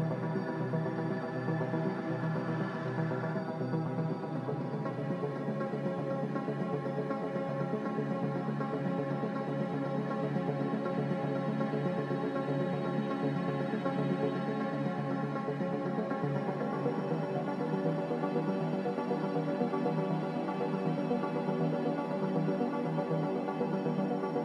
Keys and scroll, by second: 14.6 Delete, 14.6 b, 15.1 n, 15.8 m, 22.8 n.